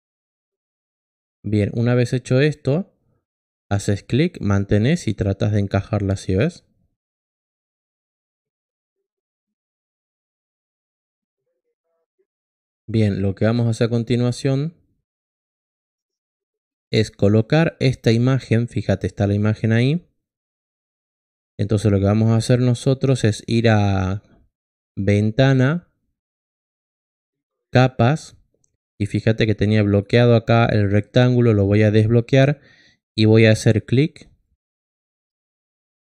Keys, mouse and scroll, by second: 3.6-7.9 drag, 10.8-12.7 drag, 14.2 click, 17.0-18.1 drag, 18.5-19.4 drag, 21.7 click, 24.7 click, 29.8 click, 30.5 click.